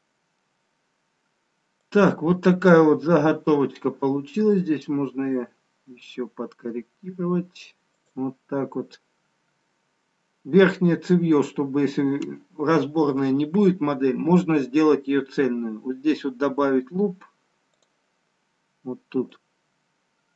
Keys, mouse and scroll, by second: 1.8 click, 5.0 g, 17.9 click, 19.4 click.